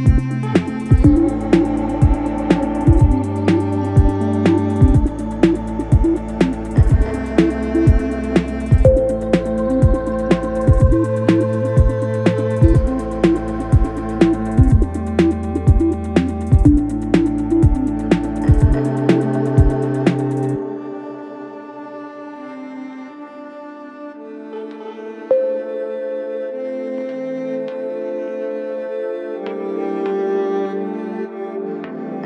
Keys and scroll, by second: 13.2 ctrl+z, 17.6 ].